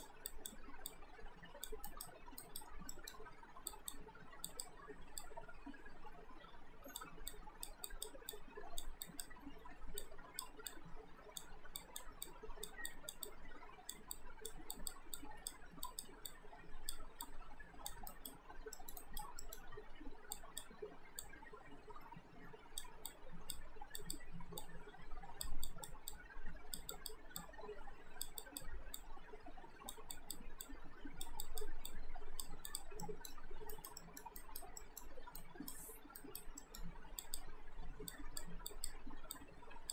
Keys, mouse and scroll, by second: 1.9 alt+right click, 2.9 alt+middle click, 3.7 click, 18.1 alt+right click, 18.7 alt+middle click, 19.0 alt+right click, 19.5 alt+middle click, 20.3 click, 33.0 alt+middle click, 33.7 alt+right click, 34.0 middle click, 34.4 right click, 34.8 middle click, 35.4 right click, 36.6 middle click, 37.2 click.